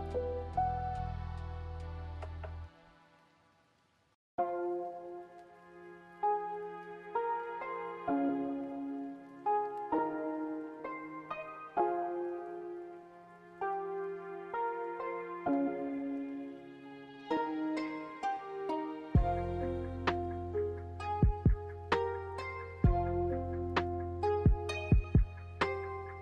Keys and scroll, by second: 1.8 a, 3.6-5.5 typing, 9.4 s, 18.9 n, 21.0 a, 21.9 ctrl+c.